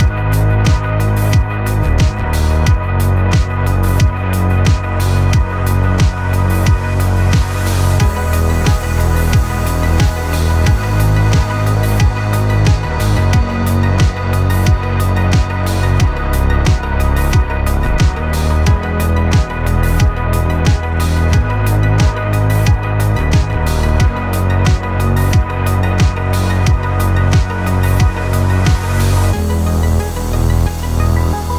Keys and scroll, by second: 23.5 1, 23.8 0.